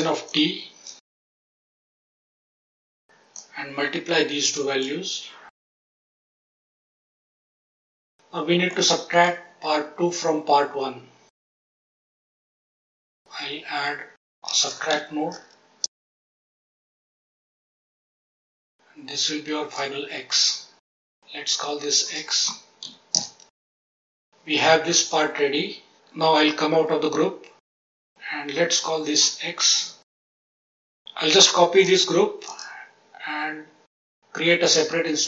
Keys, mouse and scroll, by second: 0.7 shift+d, 1.1 click, 1.5 click, 1.7 click, 2.0-2.4 drag, 3.3-4.8 drag, 5.6 click, 5.8 shift+d, 6.2 click, 6.4-6.7 drag, 7.0 drag, 8.6-9.2 middle drag, 11.3 ctrl+right click, 11.7 click, 12.0 middle click, 12.8-15.8 drag, 16.7 click, 17.7-18.1 drag, 18.5-19.7 drag, 21.1 click, 21.3-22.0 scroll down 1, 22.0-23.1 drag, 22.0-23.1 scroll down 2, 23.7 scroll down 4, 24.0 middle click, 26.7 Tab, 27.9 click, 28.8 F2, 30.3 scroll up 4, 30.8 click, 31.7 shift+d, 32.4 click, 34.6 click.